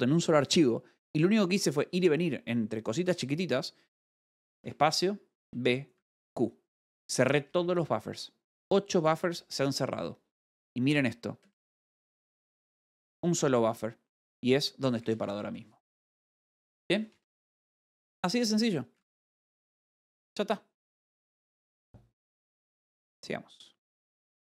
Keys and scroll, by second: 5.1 space, 5.8 b, 6.4 q, 11.9 space, 12.2 b, 12.6 e, 15.6-16.4 typing, 18.5 space, 21.6 e.